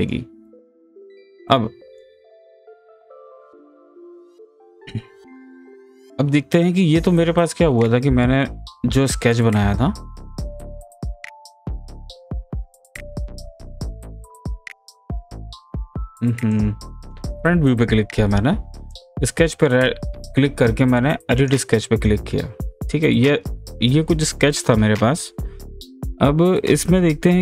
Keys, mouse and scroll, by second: 6.0 scroll down 1, 6.0 typing, 6.4 scroll up 1, 6.9-8.5 middle drag, 8.5 ctrl+z, 11.5 f, 12.7 space, 14.1 click, 16.5 click, 18.9 click, 21.4 click, 22.7 scroll down 1, 23.1 scroll up 1.